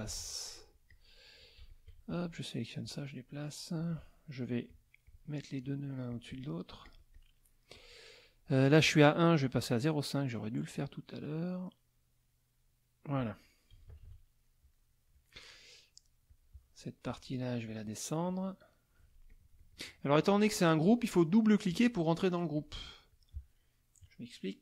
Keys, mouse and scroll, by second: 0.1 F2, 0.1 middle click, 0.2 click, 0.9 click, 1.7 shift+click, 2.1 shift+click, 2.8-4.0 drag, 4.7 click, 5.1 click, 5.6 click, 6.1 click, 6.8 click, 7.7 click, 9.5 right click, 10.2 right click, 11.6-13.0 right drag, 13.7 KP_Subtract, 14.7 middle click, 16.3 click, 17.1 click, 17.7 click, 18.2 click, 19.3 click, 20.3 click, 22.6 click, 23.1 click.